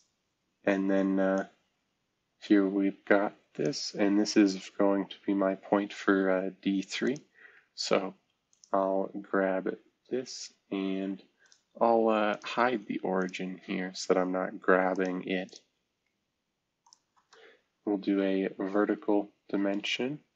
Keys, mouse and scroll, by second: 9.2-10.6 scroll down 2, 10.6-11.4 scroll up 1, 11.4 middle click, 12.3 middle click, 12.6 space, 13.2 middle drag, 18.5 typing.